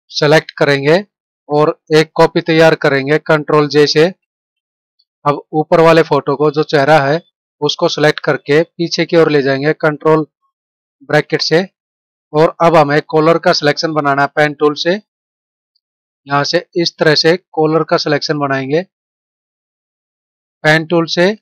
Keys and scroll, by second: 4.1 ctrl+j, 11.1 ctrl+[.